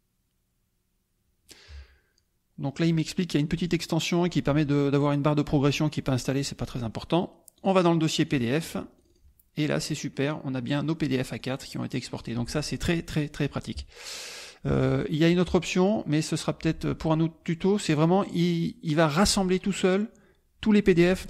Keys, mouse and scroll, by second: 6.2 click, 7.5 click, 8.4 click, 8.9 click, 11.5 click, 11.7 click, 12.2 click, 14.7 alt+Tab, 15.9 click.